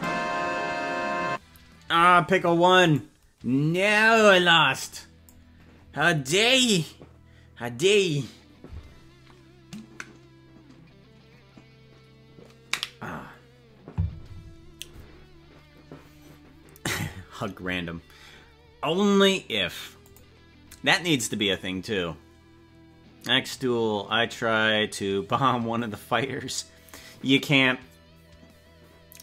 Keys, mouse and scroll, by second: 0.0 right click, 3.0 right click, 4.1-5.3 drag.